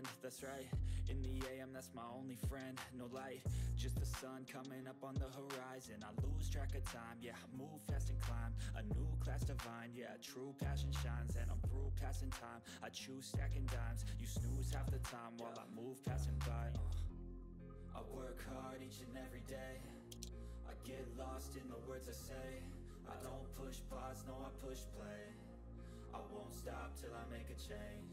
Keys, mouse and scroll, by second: 1.3 typing, 5.1-6.6 typing, 14.8 ctrl+middle click, 15.5 click, 18.6 click, 20.1 ctrl+z, 20.3 click, 21.4-28.1 drag.